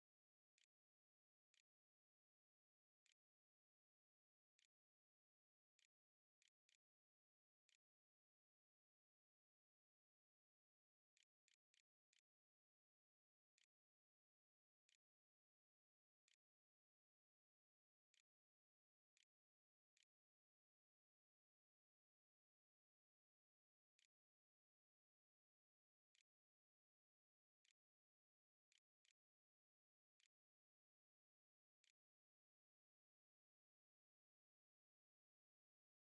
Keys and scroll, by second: 0.0-8.0 typing, 2.5 Tab, 9.3-10.8 typing, 11.2 Left, 11.9 Left, 12.6 Right, 12.8 Menu, 14.0 shift+Return, 14.7 shift+', 15.1 Return, 15.3 Delete, 15.8 End, 17.1 Delete, 17.3 Return, 18.4 shift+Return, 18.8 shift+', 19.5 ;, 21.4-23.5 typing, 23.8 Return, 24.8-28.5 typing, 29.6-32.8 typing, 29.8 Tab.